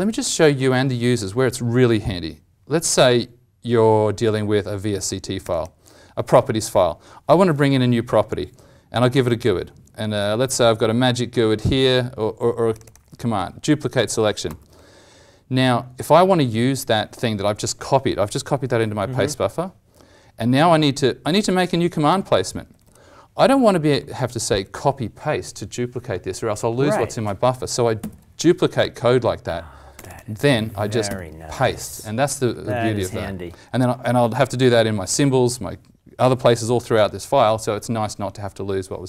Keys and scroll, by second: 14.4 ctrl+c, 27.9 ctrl+d, 31.0 ctrl+v, 32.6 ctrl+z, 33.1 ctrl+z.